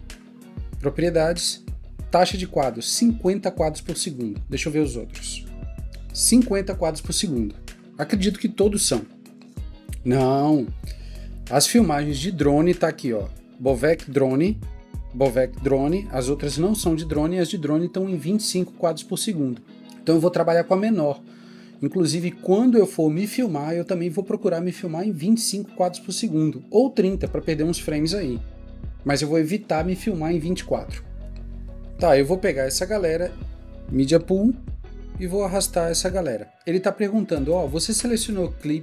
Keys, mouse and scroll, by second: 34.6 alt+Tab, 35.1 shift+click.